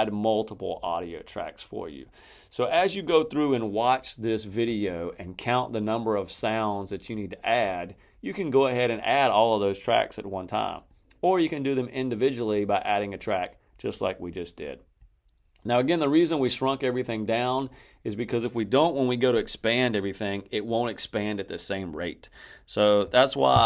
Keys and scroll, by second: 23.4 alt+-.